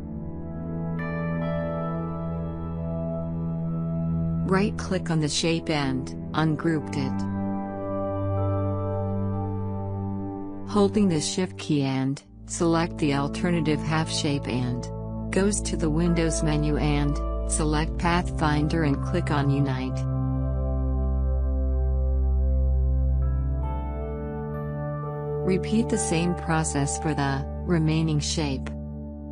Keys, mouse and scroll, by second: 0.4 click, 7.8 right click, 7.8 right click, 8.5 click, 9.6 right click, 10.9 click, 13.6 shift+click.